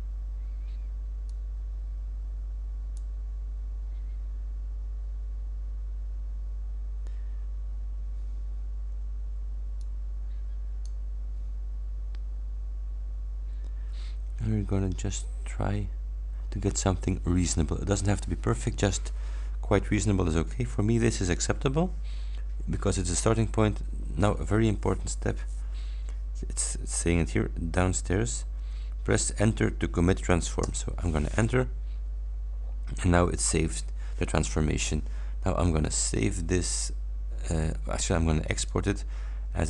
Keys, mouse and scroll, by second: 1.3 click, 9.9 click, 30.7 Return, 35.9 click, 38.6 click.